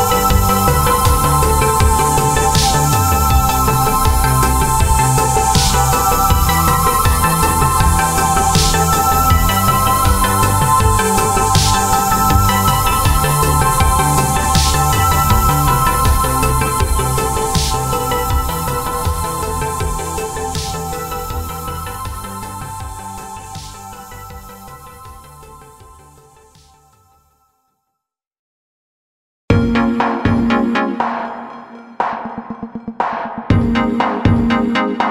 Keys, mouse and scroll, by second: 2.3 click, 4.5 click, 6.3 click, 8.6 click, 10.1 click, 12.6 click, 14.8 click, 24.5 click, 30.8 click.